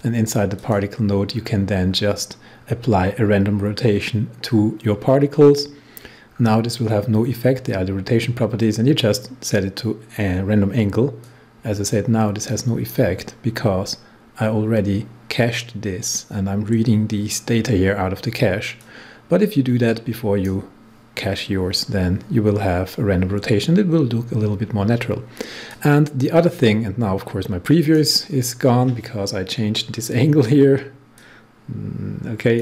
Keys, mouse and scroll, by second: 1.3 scroll down 1, 5.8 scroll down 1, 11.2-15.4 drag, 18.7-23.0 drag, 25.6-30.5 drag, 31.1-32.6 drag.